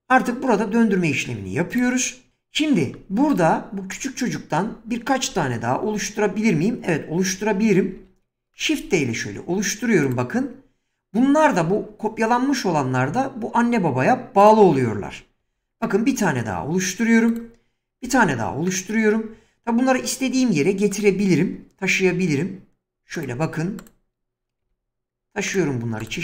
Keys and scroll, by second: 5.3 7, 7.9 shift+d, 15.4 shift+d, 22.0 g.